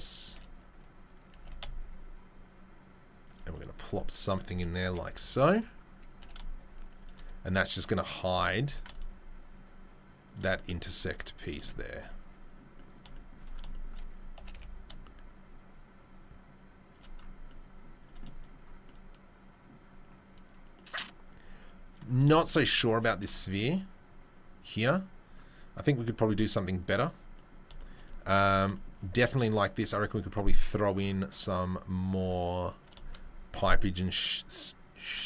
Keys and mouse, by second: 0.2 s, 1.3 g, 3.3-3.8 right drag, 4.9 KP_3, 5.2 KP_1, 6.2 g, 7.5 s, 8.3 g, 10.5-11.1 drag, 11.1 z, 11.5-11.9 shift+middle drag, 13.0 shift+middle drag, 14.4 g, 17.0-23.2 right drag, 18.0 click, 18.0 middle click, 23.2 shift+middle drag, 27.7 shift+middle drag, 28.4 shift+middle drag, 28.6-35.2 shift+right drag, 33.3-35.0 drag, 33.3-35.0 middle drag.